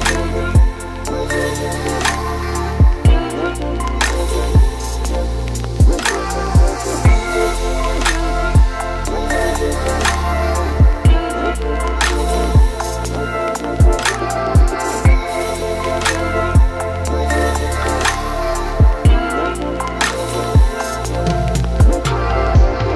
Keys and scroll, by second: 5.6 ctrl+t, 18.9 v, 20.9 ctrl+d, 21.0 ctrl+t.